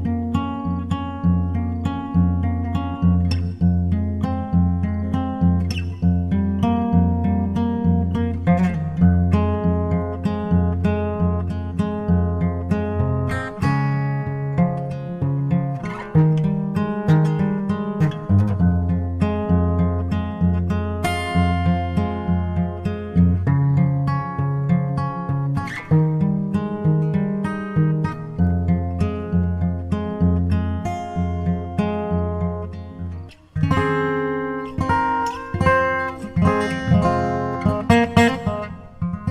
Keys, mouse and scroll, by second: 1.9-4.4 middle drag, 5.0-6.7 drag, 6.6-8.7 middle drag, 7.7 Tab, 9.3-12.5 drag, 17.6-20.1 drag, 25.5-28.6 drag, 30.5-33.5 drag, 37.3-39.1 drag, 38.3-39.3 middle drag.